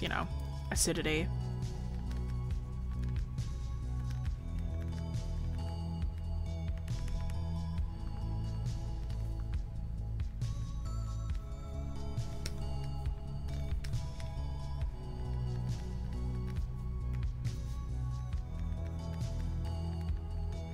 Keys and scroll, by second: 9.5 scroll up 1, 12.3 scroll, 13.7 scroll.